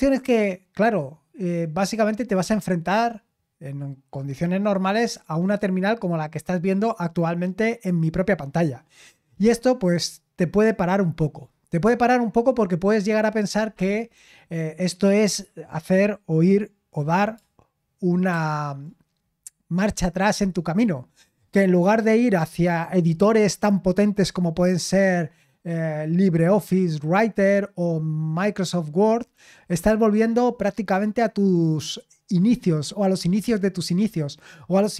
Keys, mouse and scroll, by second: 18.3 super+m.